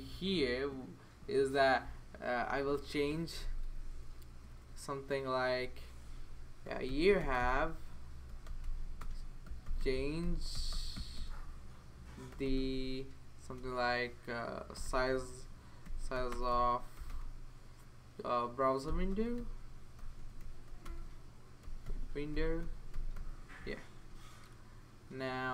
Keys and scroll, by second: 3.1 Left, 3.4 BackSpace, 3.9 BackSpace, 4.5 BackSpace, 6.4-17.5 typing, 18.6-23.6 typing.